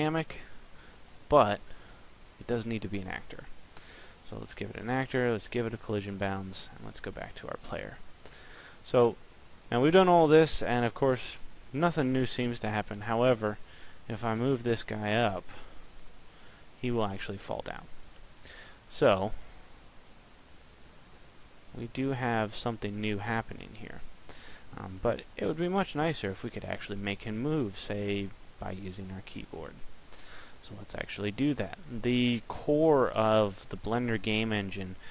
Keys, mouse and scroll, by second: 1.2 click, 4.4 click, 6.7 right click, 8.7 middle click, 11.0 p, 14.0 click, 15.7 p, 19.3 click.